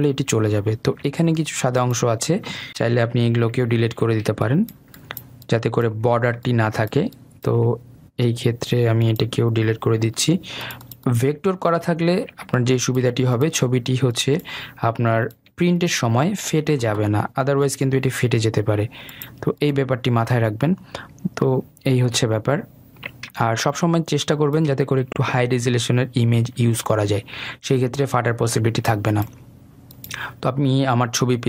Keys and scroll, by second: 10.8 Delete.